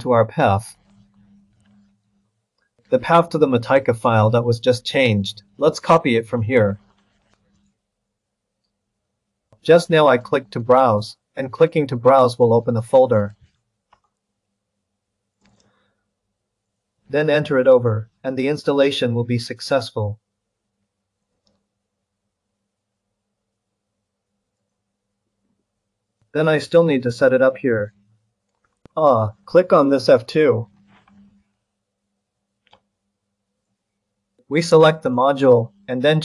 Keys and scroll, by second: 6.5 ctrl+c, 7.0 ctrl+c, 13.3 ctrl+v.